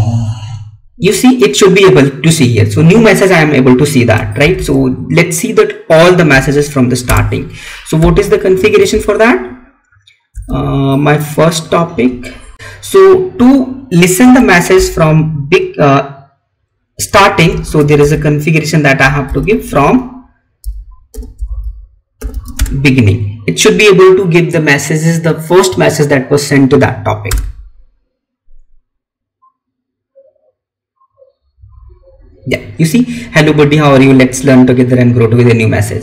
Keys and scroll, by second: 4.3 ctrl+c, 7.8 Up, 8.8 Left, 12.5 alt+Tab, 14.1 space, 22.4 space.